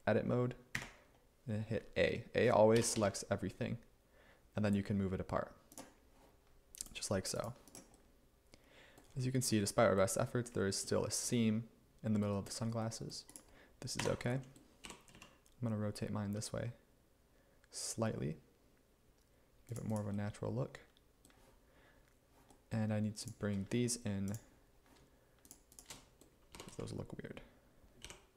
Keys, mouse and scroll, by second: 0.8 a, 2.8 g, 3.0 x, 14.1 Tab, 14.9 r, 15.2 z, 26.6 g, 28.1 y.